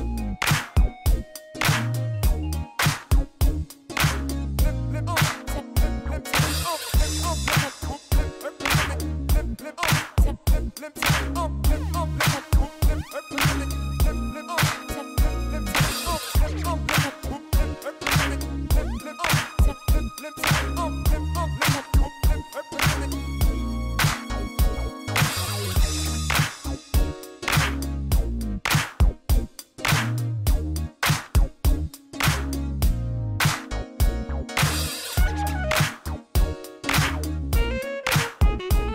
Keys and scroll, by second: 2.4 shift+a, 5.4 Tab, 5.8 s, 7.2 1, 7.7 ctrl+b, 9.4 Tab, 16.3 3, 16.5 Return, 17.7 shift+d, 18.2 shift+z, 20.8 g, 21.0 shift+z, 21.5 g, 21.7 z, 23.6 shift+d, 24.0 shift+z, 25.6 r, 28.3 alt+a, 30.0 shift+d, 30.2 shift+z, 31.4 Tab, 31.8 s, 33.0 Tab, 37.6 alt+a.